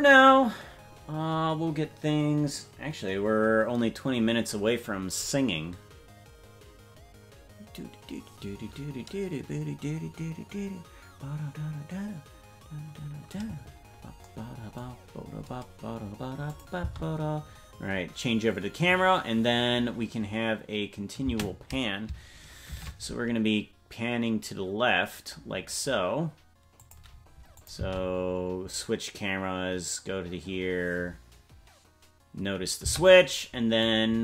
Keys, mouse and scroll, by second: 16.4 click, 16.7 space, 21.4 space, 22.6 shift+`, 27.6 click, 27.7 space, 33.4 space, 33.8 click.